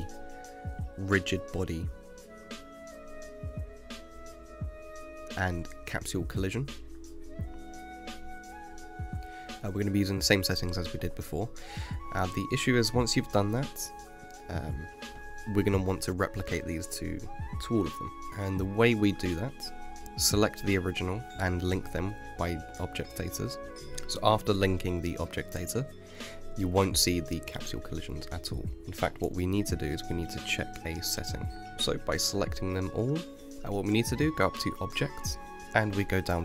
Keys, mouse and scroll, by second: 0.4 click, 2.2-7.2 drag, 8.9-12.0 drag, 12.1 KP_1, 13.6 click, 15.2-17.7 middle drag, 17.7 l, 19.8 ctrl+l, 23.7 middle click, 23.8 click, 25.7 click, 26.7-29.1 middle drag, 29.1 KP_5, 30.8-31.5 middle drag, 32.7 click, 34.0 middle click, 34.2 click.